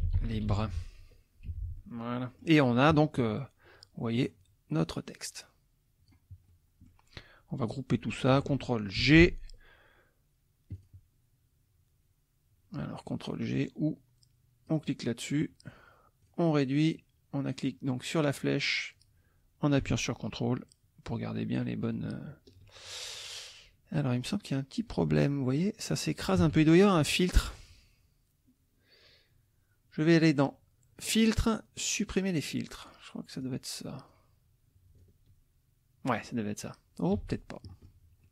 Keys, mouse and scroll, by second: 0.0-1.0 typing, 1.5 F1, 1.8 click, 2.9 KP_Subtract, 4.0 middle click, 4.8-6.3 drag, 6.5-7.1 middle drag, 9.0 ctrl+g, 10.7 click, 14.7 click, 16.2 click, 18.5-26.4 drag, 26.4 ctrl+z, 26.8 ctrl+click, 27.4 click, 31.0 click, 32.0 click, 32.8 click, 33.4-34.3 drag, 35.0-37.3 ctrl+drag, 37.1 ctrl+z, 37.7 ctrl+middle click, 38.2 middle click.